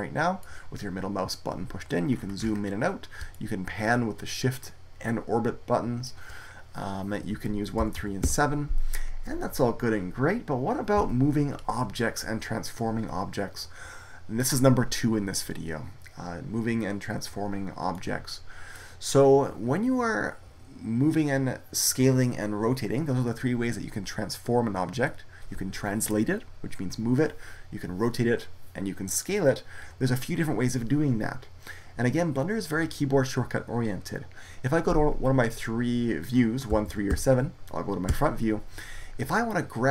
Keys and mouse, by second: 4.4 middle click, 7.6 KP_1, 7.8 KP_3, 8.1 KP_7, 10.9 KP_1, 17.9-20.5 middle drag, 36.6 KP_1, 36.7 KP_3, 37.0 KP_7, 37.9 KP_1.